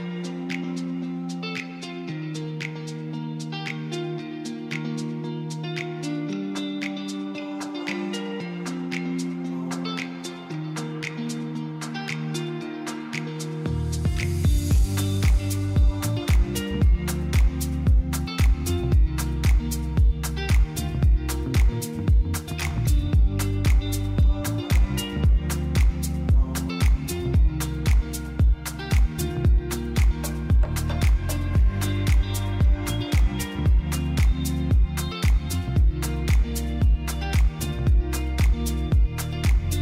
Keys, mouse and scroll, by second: 0.7 click, 6.2 click, 6.7-8.4 middle drag, 9.5 middle click, 13.9 click, 14.4 click, 19.1-20.4 middle drag, 21.8 middle click, 23.5 shift+click, 23.9 shift+click, 25.0 shift+click, 26.0 KP_3, 27.1 g, 27.5 z, 28.6 click, 30.1 click, 36.3 click, 39.7 click.